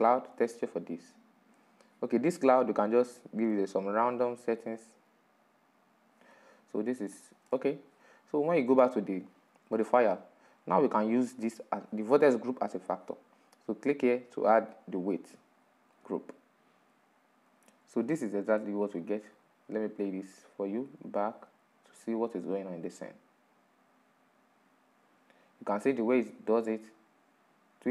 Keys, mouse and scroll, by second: 0.3-3.6 middle drag, 3.6-6.0 drag, 6.0-14.4 middle drag, 14.4-15.6 drag, 15.6-16.6 middle drag, 16.6-17.6 scroll up 3, 17.6-18.5 middle drag, 18.5 scroll down 3, 18.9-20.0 middle drag, 20.0-23.5 drag.